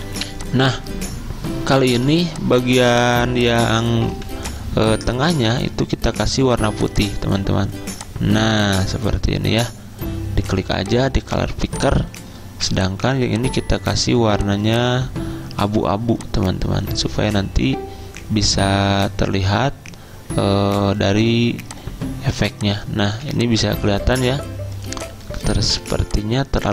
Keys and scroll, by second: 2.1 z, 3.4 v, 12.6 v, 23.1 z, 25.7 v.